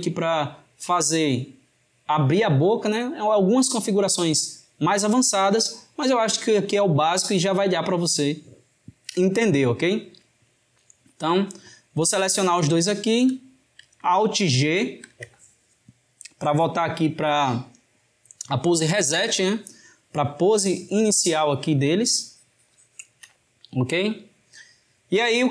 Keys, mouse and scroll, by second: 12.7 shift+drag, 14.8 alt+g, 21.1-25.2 drag, 25.2-25.5 shift+middle drag.